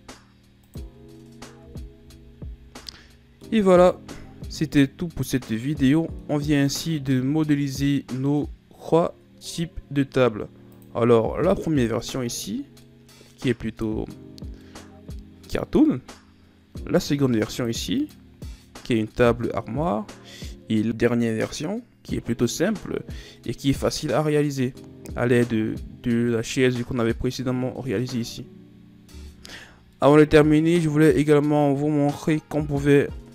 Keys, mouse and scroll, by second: 1.6 Tab, 2.0 a, 2.3 a, 2.5 scroll down 3, 2.8-3.7 middle drag, 3.7-4.1 scroll up 1, 4.1-6.8 middle drag, 6.8-7.1 shift+scroll down 1, 7.1-10.1 middle drag, 10.7 click, 11.5 click, 12.2-12.6 scroll down 6, 12.9-17.5 middle drag, 17.5 click, 18.0 click, 18.6-19.0 scroll down 1, 19.0-21.5 middle drag, 21.5 click, 21.9 click, 22.7 scroll up 4, 23.4-26.4 middle drag, 30.0-33.0 middle drag.